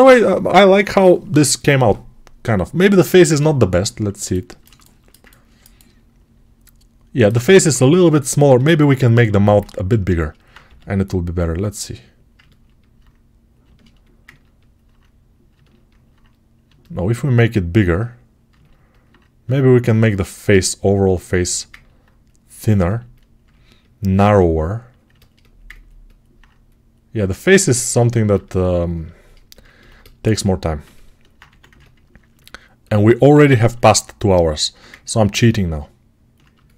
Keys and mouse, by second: 8.2-12.2 ctrl+alt+right drag, 9.5 alt+q, 10.5 g, 12.2-14.7 ctrl+alt+drag, 21.3-27.6 ctrl+alt+drag, 27.6-32.2 alt+shift+right drag, 31.3 1, 32.2 ctrl+alt+click, 32.5 alt+right click, 32.8-34.3 alt+shift+drag, 34.3-36.7 alt+shift+right drag.